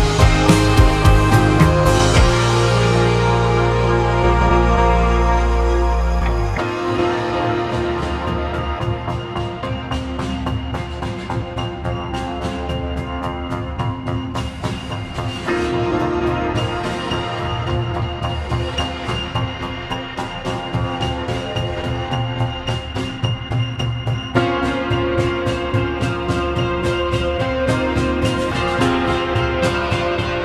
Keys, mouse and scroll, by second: 16.2 `, 18.3-18.8 scroll up 4, 18.8-20.3 shift+middle drag, 20.3-23.2 shift+right drag, 23.2 click, 24.4 Tab, 25.0 click, 26.2 3, 26.4 click, 29.3 shift+s, 30.2 shift+s.